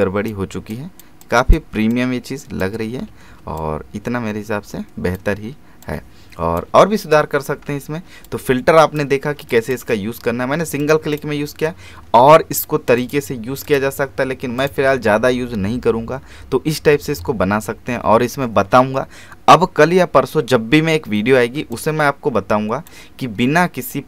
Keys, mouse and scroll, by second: 3.1 typing, 3.6-6.7 drag, 6.7 alt+space, 6.9-7.2 alt+scroll down 1, 7.2 alt+space, 7.7-8.1 alt+scroll up 1, 8.3 click, 9.2 scroll up 1, 9.5 click, 17.7-19.5 scroll down 1, 21.6 space, 21.7 click, 22.3 space, 23.4 scroll down 1.